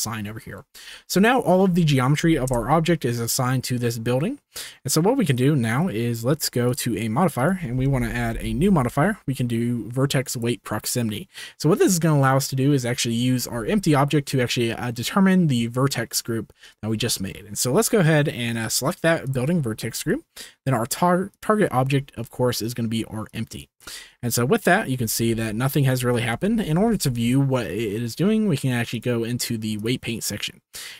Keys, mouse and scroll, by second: 0.8 Tab, 1.1 click, 2.4 KP_0, 5.4 click, 6.6 click, 7.3-10.4 drag, 18.7 click, 21.3 click, 25.0 z, 26.1 shift+click, 26.7 ctrl+s, 28.9-29.8 drag.